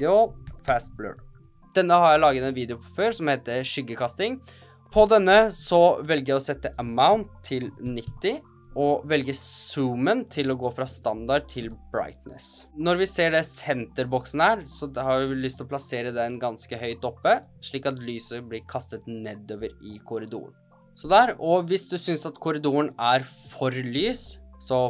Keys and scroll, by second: 0.0-1.9 typing, 21.5 space.